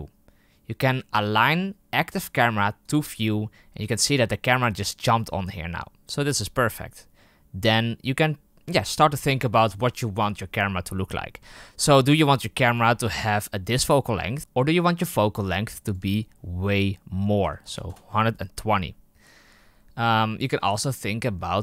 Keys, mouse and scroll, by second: 14.4-21.6 drag.